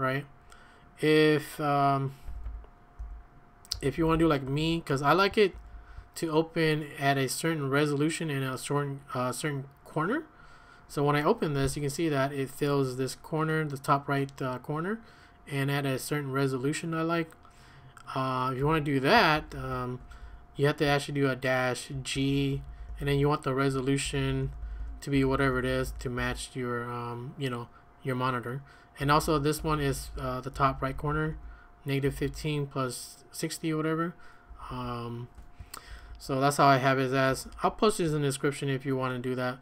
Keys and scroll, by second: 2.2-4.1 typing, 4.4 Escape, 4.6 Escape, 5.5 ctrl+a, 5.7 ctrl+a, 11.6 Right, 18.6 q, 19.3 ctrl+a, 19.5 ctrl+a, 20.0 Escape, 20.2 Escape, 20.8-26.3 typing, 28.8-32.2 typing, 34.5 Escape, 34.7 Escape, 35.9 ctrl+a, 36.1 ctrl+a, 36.1 typing, 37.3 ctrl+a, 37.5 ctrl+a.